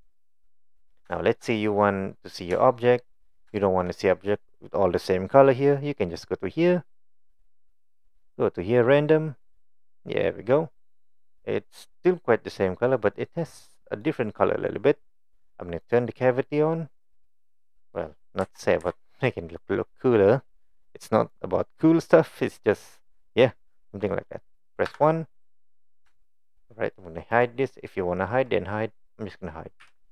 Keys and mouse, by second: 0.1-0.5 middle drag, 1.3 shift+middle click, 1.6-2.4 middle drag, 2.7-3.2 shift+middle drag, 3.6 shift+middle click, 7.2-9.9 drag, 10.3-13.0 middle drag, 13.2 middle drag, 13.8 middle click, 15.9-17.5 drag, 18.4 n, 18.8 n, 19.4-20.3 middle drag, 20.5 middle drag, 21.2 click, 21.7 middle click, 22.4 click, 24.9 KP_1, 26.3 shift+middle click, 26.7-27.0 middle drag, 27.4 click, 29.8 h.